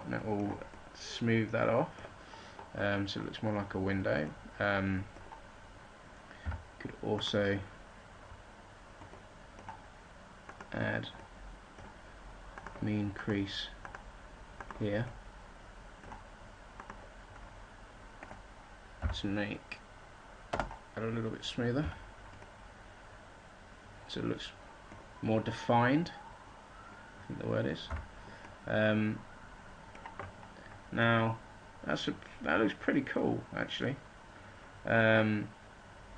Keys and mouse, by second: 7.1 z, 10.2-12.9 middle drag, 18.7-20.9 middle drag, 21.8 z, 27.9 Tab.